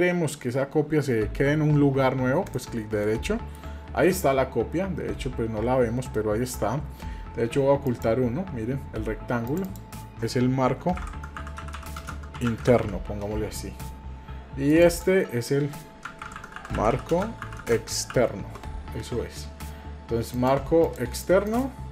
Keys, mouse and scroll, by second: 3.0 middle click, 6.1 middle click, 7.9 click, 9.5 click, 9.6-13.9 drag, 14.7 click, 14.9-19.1 drag, 19.1 middle drag, 20.3 click, 20.8 click, 21.5 click.